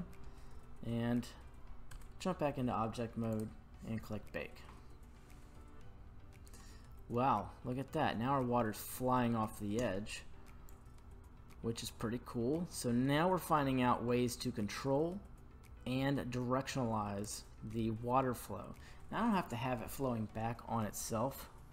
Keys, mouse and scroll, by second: 2.0 Tab, 3.3-6.2 drag, 7.1-8.0 middle drag, 10.7-11.6 drag, 11.7 click, 11.9-17.3 drag, 17.7-18.8 middle drag.